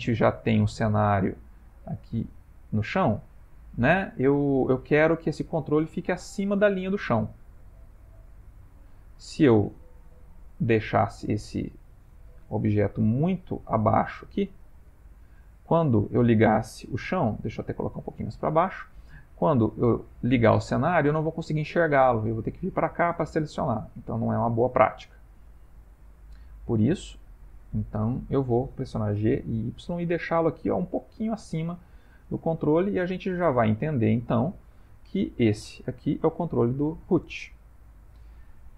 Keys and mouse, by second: 2.3 click, 3.7 middle click, 8.6 click, 10.3 middle click, 11.6 middle click, 12.4 g, 16.7 g, 20.0 click, 20.5 middle click, 21.8 middle click, 23.4 middle click, 27.3 click, 27.9 middle click, 29.2 g, 31.9 middle click, 34.3 Tab, 35.1 click, 35.7 middle click.